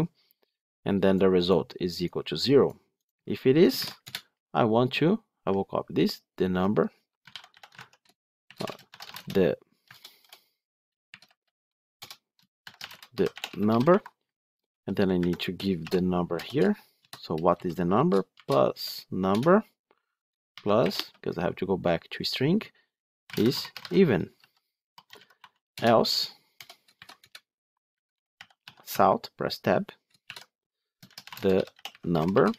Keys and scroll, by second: 7.6 Tab, 9.8 ctrl+BackSpace, 19.2 Return, 28.8 Tab.